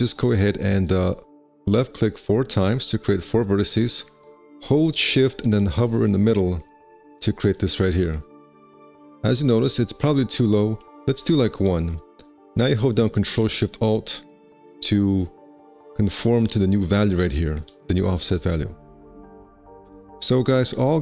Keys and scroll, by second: 11.1 KP_1.